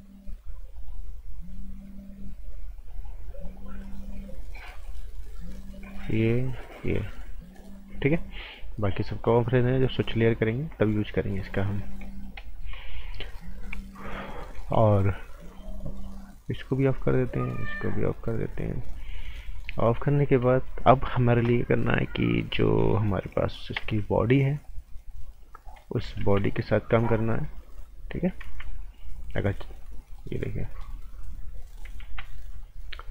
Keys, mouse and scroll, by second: 11.3 scroll down 1, 11.5 right click, 11.9 scroll up 1, 12.0 right click, 16.7 click, 18.8 right click, 19.8 scroll down 1, 20.0 right click, 20.3 scroll up 1, 20.5 right click, 23.7 z, 24.6 click, 26.2 ctrl+z, 27.0 click, 28.4 ctrl+z, 29.0 click, 30.4 scroll up 1, 30.6 right click, 31.2 click, 32.0 ctrl+z, 32.4-33.1 scroll down 1.